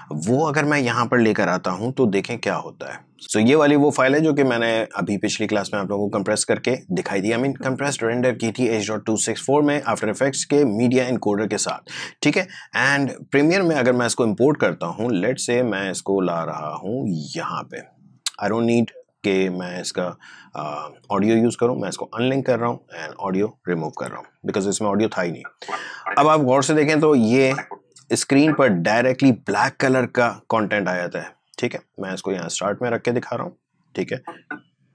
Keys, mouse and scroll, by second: 2.9-7.6 drag, 8.9-18.9 drag, 19.2 click, 19.8 right click, 22.2 click, 24.1 Delete, 25.2-34.9 drag.